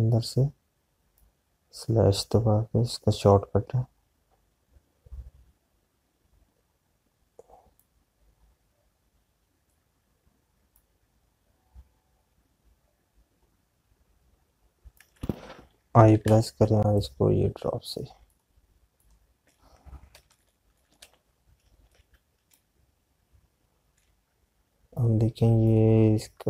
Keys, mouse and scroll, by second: 8.7 click, 17.6 l, 18.1 click.